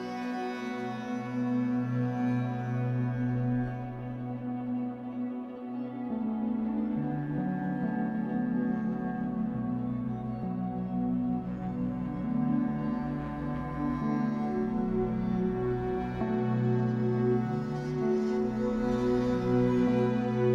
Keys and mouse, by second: 0.6 click, 1.4 click, 1.7 click, 3.9-9.3 drag, 11.1 click, 11.8 click, 13.0 click, 15.8-18.0 drag, 18.1-19.6 drag.